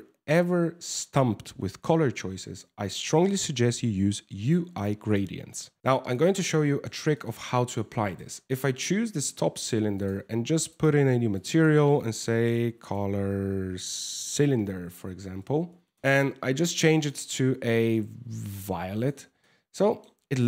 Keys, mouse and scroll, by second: 5.8 click, 6.3 shift+middle click, 6.8 middle click, 7.2 shift+middle click, 7.7 right click, 9.6 click, 10.3 click, 10.9 click, 11.1 click, 14.7 BackSpace, 16.0 click, 16.5 click, 19.0 middle click, 19.9 shift+middle click.